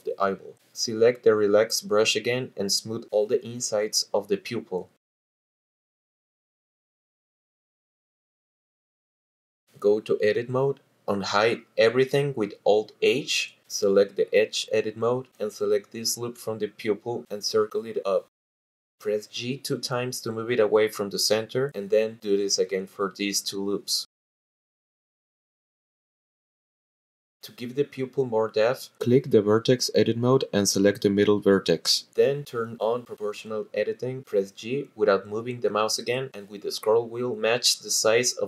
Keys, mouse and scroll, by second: 0.5-2.9 drag, 5.9 shift+click, 7.7-8.7 shift+drag, 12.3 click, 14.0 alt+h, 16.1 click, 16.5 click, 17.4 alt+shift+click, 18.5 click, 20.1 g, 20.4 g, 22.1 click, 22.8 click, 23.4 alt+shift+click, 23.7 ctrl+z, 24.3 click, 24.8 g, 25.0 g, 25.8 click, 26.4 alt+shift+click, 26.7 ctrl+z, 26.7 click, 27.1 g, 27.4 g, 30.2 click, 31.3 click, 33.0 click, 36.7 g, 37.0-38.4 scroll up 9.